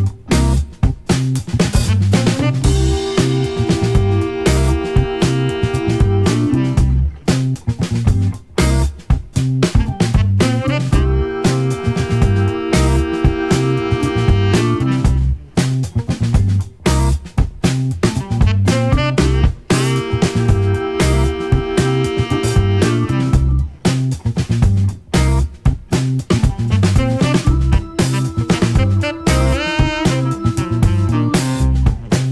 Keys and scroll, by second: 6.4 4, 7.1 Return.